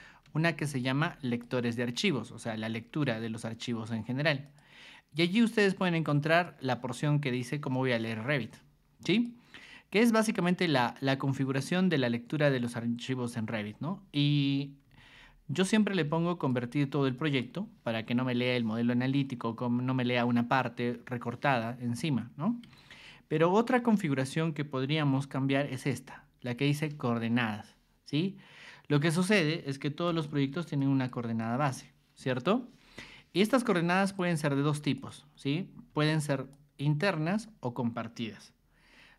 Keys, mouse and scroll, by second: 0.2 ctrl+2, 0.8 ctrl+click, 2.9 Escape, 4.4 click, 5.5 ctrl+2, 6.1 ctrl+click, 8.3 Escape, 9.1 click, 13.7 ctrl+2, 14.8 g, 15.7 ctrl+click, 17.2 ctrl+shift+click, 22.6 Escape, 23.9 ctrl+2, 25.0 r, 25.8 ctrl+click, 30.8 click, 31.4 click, 33.0 Escape, 34.0 click, 34.6 ctrl+1, 34.9 click, 35.9 r, 36.5 ctrl+click.